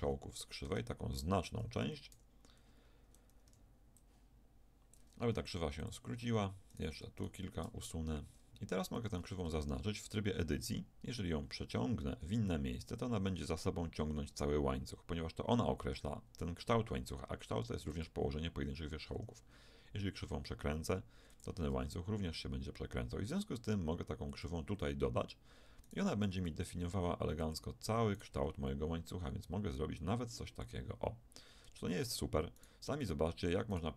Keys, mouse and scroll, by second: 0.0 z, 0.7 Tab, 2.1 v, 3.5 b, 5.3 x, 6.7 click, 7.7 x, 9.0 a, 9.2 a, 9.5 a, 12.1 g, 19.1 r, 21.7 g, 25.8-27.7 right drag, 26.2 g, 28.1-30.5 right drag, 28.3 g, 31.7 Tab, 32.1 right click.